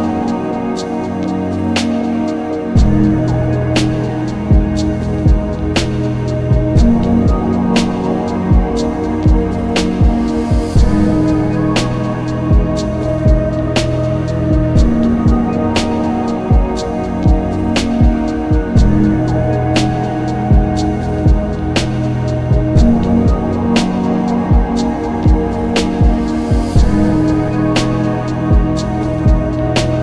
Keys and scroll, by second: 0.2 s, 2.7 ctrl+z, 6.6 ctrl+z, 7.3 ctrl+alt+z, 8.6 ctrl+s, 9.8 ctrl+z, 17.8 ctrl+s, 19.3 ctrl+z, 21.9 ctrl+z, 29.7 ctrl+shift+z.